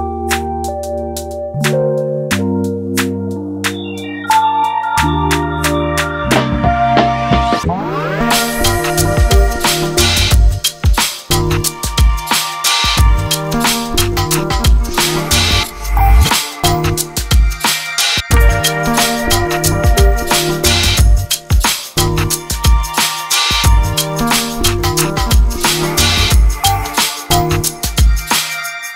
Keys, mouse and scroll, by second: 0.4 click, 0.9 alt+shift+click, 1.3 alt+s, 3.0 ctrl+r, 4.6 click, 5.1 ctrl+r, 6.9 alt+s, 10.6-11.9 middle drag, 11.9-12.2 scroll down 1, 12.2 middle click, 12.8-13.3 scroll down 1, 13.3-14.7 middle drag, 14.7 click, 15.8 alt+s, 17.4 ctrl+z, 17.6-18.8 middle drag, 18.8 KP_Decimal, 19.2-20.2 middle drag, 20.2 click, 20.6 click, 21.3 alt+s, 22.2 g, 23.3 click, 24.4 g, 25.2 alt+s, 27.1 click, 27.7 g.